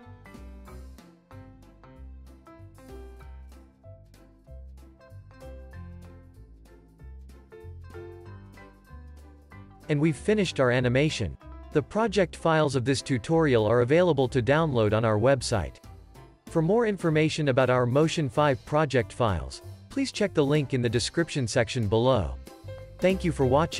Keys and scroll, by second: 3.4 super+s, 3.7 space, 16.8 5, 18.1 super+s.